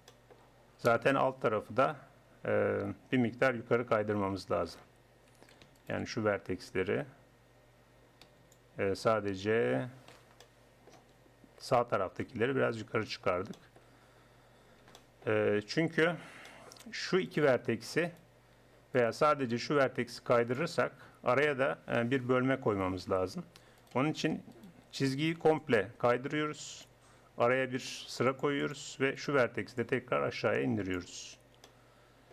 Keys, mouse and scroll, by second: 0.2 click, 1.2 click, 1.7-3.6 drag, 3.6 a, 4.0 a, 5.3 a, 10.2 c, 12.2-15.8 drag, 15.8 z, 17.3-19.5 drag, 19.5-21.1 middle drag, 21.1-23.1 drag, 23.1 ctrl+z, 23.1 middle click, 23.8-25.6 drag, 25.6 middle click, 26.2-27.4 drag, 27.8 ctrl+r, 29.2-32.3 drag.